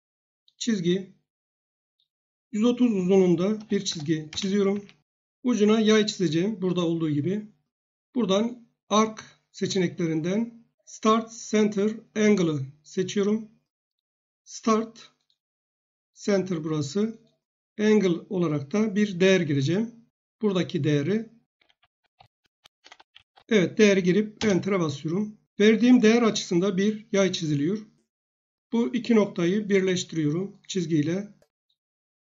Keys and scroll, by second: 3.3-4.4 typing, 4.7 Escape, 21.2-23.7 typing, 24.4 Return.